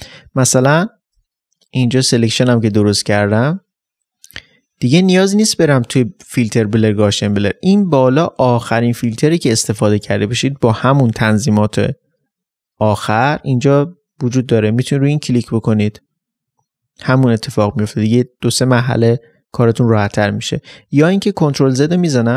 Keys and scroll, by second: 0.0 space.